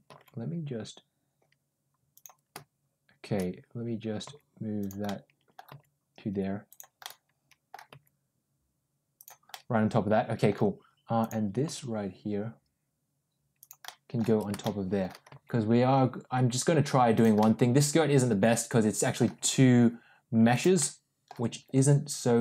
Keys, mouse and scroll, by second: 4.1 g, 5.0 middle click, 5.6 g, 7.0 middle click, 7.8 g, 9.4 middle click, 11.1 click, 11.5 g, 13.7 middle click, 14.5 middle click, 15.2 g, 17.3-19.0 middle drag, 19.2 g, 20.7 middle click, 21.4 g.